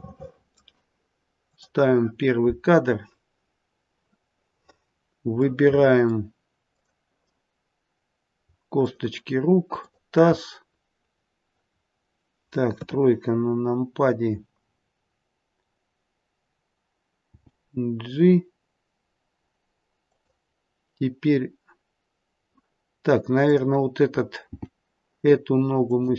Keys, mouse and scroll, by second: 1.5 click, 5.4 middle click, 5.4-6.6 scroll up 5, 6.6 click, 8.7 shift+click, 11.7 shift+click, 11.7-12.7 scroll down 2, 12.7 scroll down 1, 12.7 KP_3, 13.4-14.7 scroll down 1, 17.3 g, 23.4 click, 24.6 g.